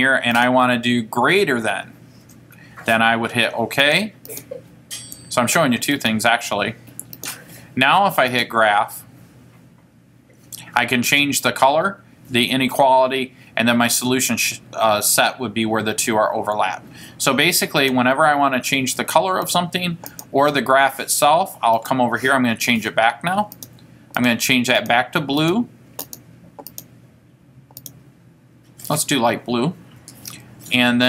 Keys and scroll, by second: 0.5 Right, 4.0 Return, 6.2 Return, 7.4 Return, 19.6 Left, 20.2 Left, 21.9 Return, 23.7 Right, 24.1-24.8 typing, 24.9 Right, 25.6 Right, 26.2 Right, 27.7-28.4 typing.